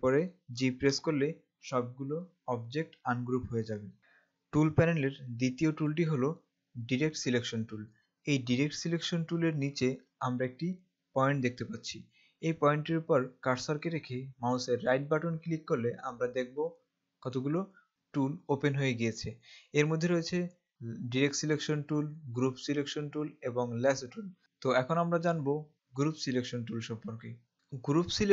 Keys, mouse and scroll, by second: 0.5 ctrl+shift+g, 15.0 right click.